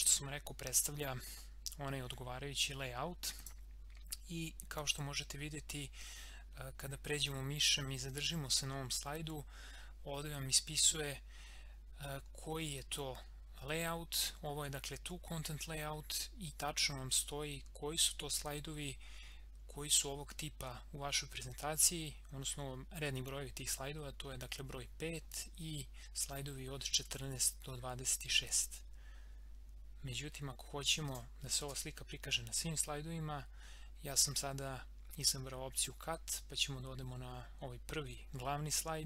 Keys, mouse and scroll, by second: 1.5 scroll up 1, 3.4 click, 3.7 scroll up 1, 31.1 click, 31.6 ctrl+x, 35.7 click.